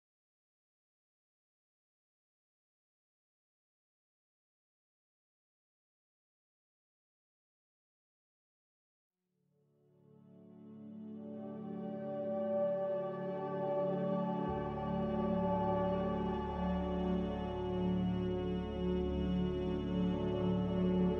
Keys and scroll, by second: 5.8 ctrl+z, 11.0 r, 13.8 a.